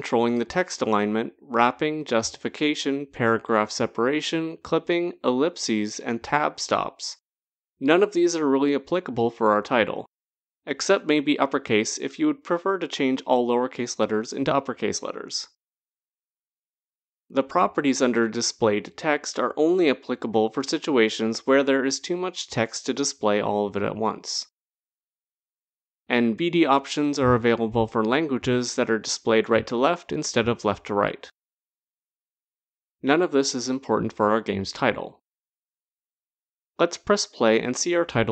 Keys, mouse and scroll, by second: 1.5-3.4 typing, 2.9 click, 8.1 click, 15.9 click, 17.8 click, 20.5 click, 21.1-21.5 scroll down 2, 22.9-25.5 scroll, 26.1 click, 27.6 click, 31.9 click, 33.5-36.1 scroll, 36.9 click, 36.9-38.3 scroll.